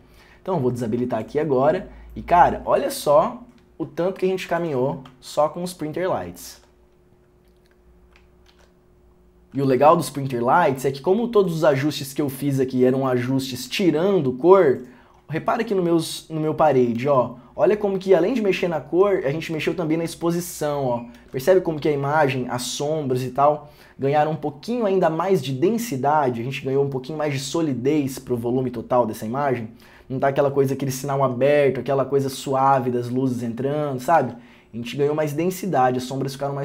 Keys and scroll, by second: 5.2 ., 5.4 ctrl+d, 6.6 ctrl+d, 8.6 ctrl+d, 19.2 ctrl+d, 20.4 ctrl+d, 21.3 ctrl+d, 32.6 ctrl+d, 34.3 ctrl+d.